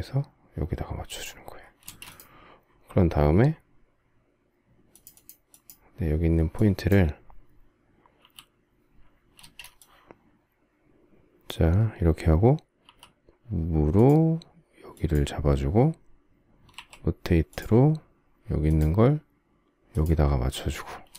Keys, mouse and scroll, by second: 1.5 space, 9.1 space, 17.2 q, 20.8 space.